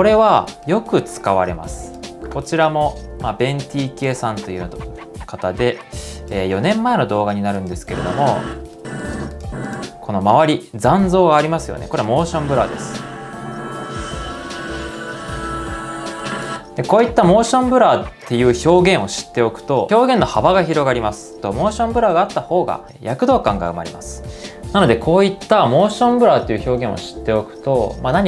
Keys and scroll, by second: 8.4 space, 16.9 ↻.